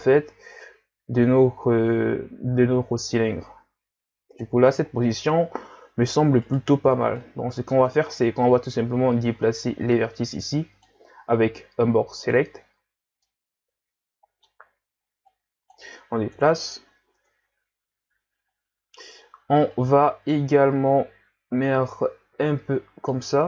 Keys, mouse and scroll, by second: 6.4 right click, 6.7 b, 8.6-11.7 drag, 12.8 z, 13.2-15.3 middle drag, 15.3-16.4 drag, 16.4 KP_1, 17.2 Tab, 18.5-19.1 scroll up 1, 19.7-22.8 shift+drag.